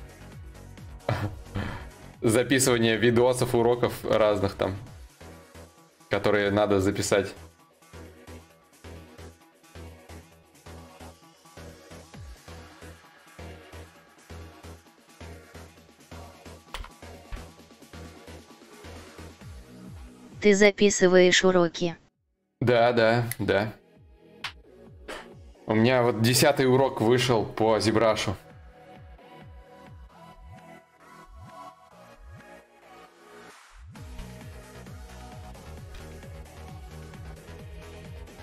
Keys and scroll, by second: 16.4 ctrl+z.